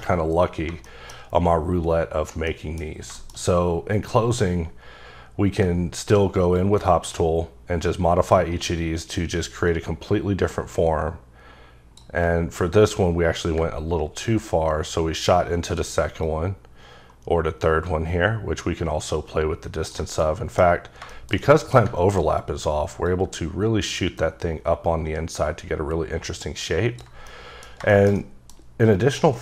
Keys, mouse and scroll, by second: 0.9 shift+middle click, 1.3 scroll down 2, 2.1-2.5 scroll down 1, 2.5 middle click, 2.9 scroll down 2, 3.2 middle click, 3.4-5.1 scroll up 2, 5.1-6.6 scroll down 2, 6.6-9.4 ctrl+drag, 12.4 ctrl+scroll up 2, 13.4 scroll down 2, 14.3 ctrl+click, 16.3 double click, 20.1 ctrl+scroll up 1, 20.3 middle click, 20.9 scroll down 1, 21.1 shift+middle click, 21.5 double middle click, 23.1 ctrl+click, 27.3 middle click.